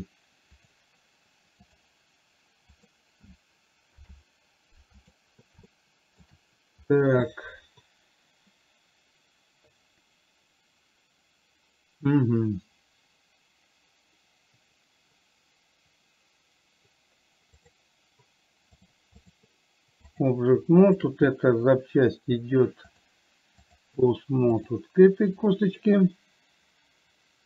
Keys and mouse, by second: 0.9-2.1 drag, 3.1 click, 4.3 ctrl+p, 6.1-6.5 shift+middle drag, 18.1 click, 19.3 click, 20.5 click, 21.1 shift+click, 23.3 click, 24.9 click.